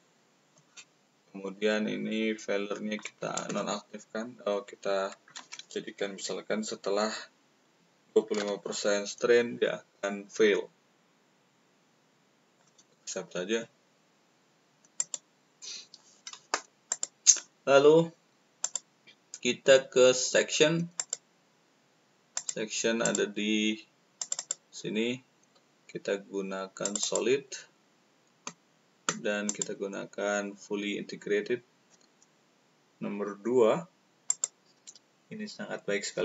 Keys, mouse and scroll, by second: 2.9 click, 7.9-8.8 typing, 12.5 click, 16.8 click, 18.5 click, 20.9 click, 22.3 click, 23.0 click, 24.1 click, 26.7 click, 29.5 click, 34.2 click.